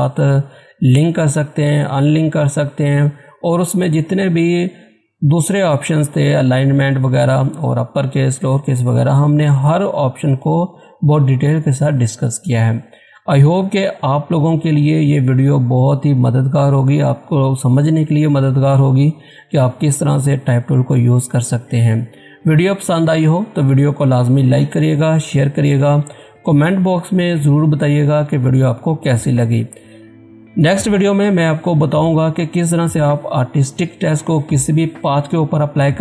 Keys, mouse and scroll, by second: 32.4 click.